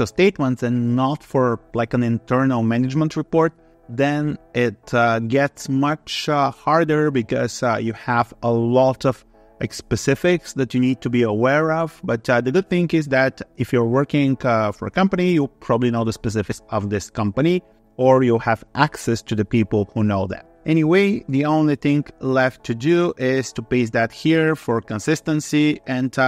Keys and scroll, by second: 22.2 ctrl+c, 23.5 ctrl+v, 25.0 ctrl+s.